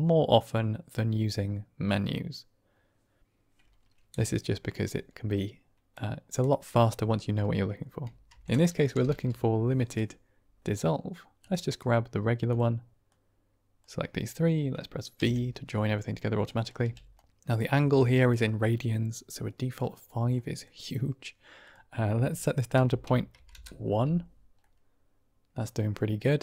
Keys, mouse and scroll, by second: 9.0 i, 13.0-13.8 drag, 15.1 v, 15.6 middle click, 16.4 drag, 16.7 g, 20.2 middle drag, 21.5-24.1 drag, 24.5-25.8 middle drag, 24.7 click.